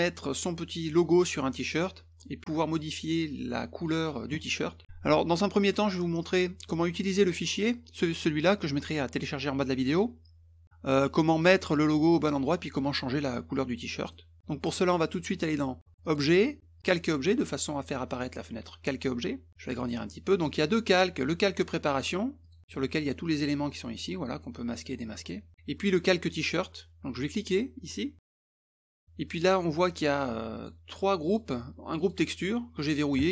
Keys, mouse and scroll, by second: 11.9 click, 14.3 middle click, 16.0 click, 16.8 click, 18.7 middle click, 19.5 click, 22.4 click, 22.6 middle click, 24.7 click, 25.2 click, 28.2 click, 28.7 click, 29.8 click, 30.5 click, 31.2 click, 32.0 click.